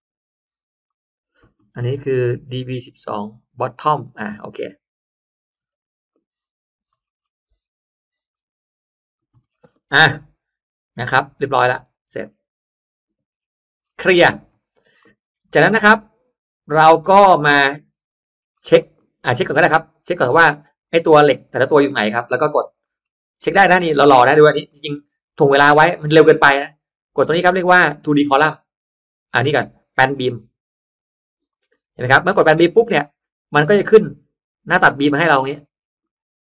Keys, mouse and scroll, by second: 0.8 click, 4.5 middle click, 4.8-5.4 scroll up 2, 5.6 m, 6.0 click, 6.1 m, 6.8-7.8 scroll down 2, 8.2-8.6 shift+scroll up 1, 9.0 shift+click, 9.4-10.2 scroll down 2, 9.5 space, 10.6 scroll down 1, 11.2-11.6 scroll up 1, 11.9 Escape, 12.2-12.5 scroll down 1, 12.9-13.6 scroll up 1, 13.7-14.2 scroll down 1, 14.2 middle click, 14.2 scroll up 1, 14.3-14.8 scroll down 2, 14.9 middle click, 15.6 middle click, 16.6 click, 17.5 click, 17.9 scroll down 1, 18.3-19.0 scroll up 2, 18.9 middle click, 19.4 middle click, 20.7 click, 21.4 click, 22.6-23.0 scroll up 1, 22.7 middle click, 24.1-24.9 scroll up 1, 24.6 middle click, 25.3-25.6 scroll down 1, 30.0 click, 31.6-32.0 scroll up 1, 32.0 middle click, 33.7 click, 35.0-36.3 scroll up 4, 35.9 middle click.